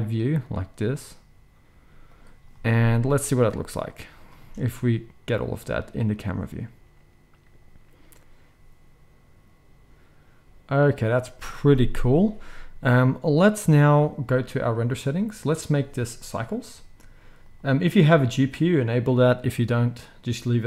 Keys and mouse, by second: 3.3-14.8 drag, 4.3 space, 11.5 space, 14.8-15.4 middle drag, 15.4-20.6 drag.